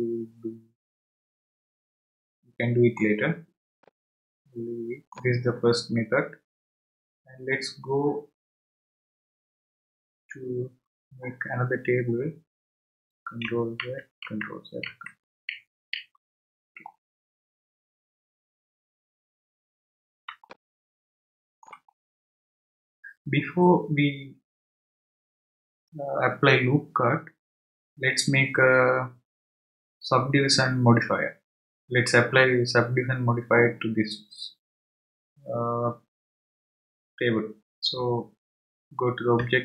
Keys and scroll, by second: 13.8 ctrl+z, 39.4 Tab.